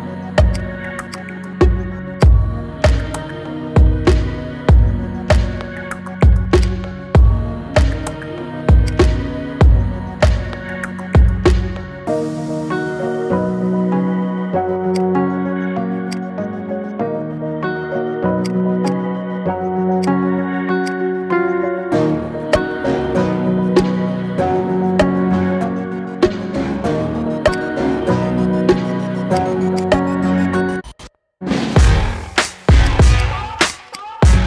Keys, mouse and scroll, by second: 0.6 click, 1.1 click, 1.8-2.2 scroll down 1, 2.2 click, 3.7 KP_1, 4.4 g, 7.0 scroll down 4, 7.2 shift+middle click, 7.9 g, 9.7 Tab, 10.0-10.7 scroll down 4, 10.7 /, 11.5-11.8 scroll up 2, 11.8-12.2 shift+middle drag, 12.3-13.2 scroll up 1, 13.2 g, 15.4-16.2 scroll down 2, 16.2 click, 16.7 scroll down 2, 17.0-18.5 middle drag, 18.5 click, 18.9 shift+click, 19.3-20.1 middle drag, 20.1 shift+drag, 20.9 shift+click, 21.7 g, 22.8-23.1 scroll down 3, 23.1-23.8 middle drag, 23.8 click, 24.1-26.0 middle drag, 26.0-26.8 scroll up 1, 26.8-27.1 shift+middle drag, 27.1-27.6 scroll up 4, 27.6 click, 29.4 shift+click, 29.9-32.5 right drag, 32.9 click, 33.8 shift+click, 34.0-34.4 right drag.